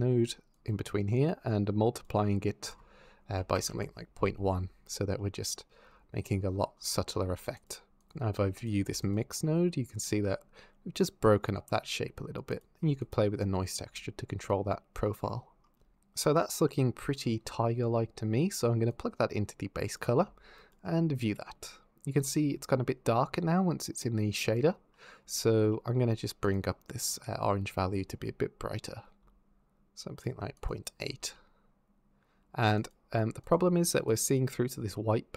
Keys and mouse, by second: 0.3 click, 1.1 click, 2.4-3.5 drag, 5.0 click, 7.4 ctrl+shift+click, 7.8 ctrl+shift+click, 8.4 click, 8.8 ctrl+shift+click, 12.3 click, 13.8-15.0 shift+drag, 16.7 middle click, 17.3 middle click, 18.7 click, 20.4 ctrl+shift+click, 24.7 click, 26.3 click, 27.2 middle click, 30.4 click, 31.2 click, 32.6 click.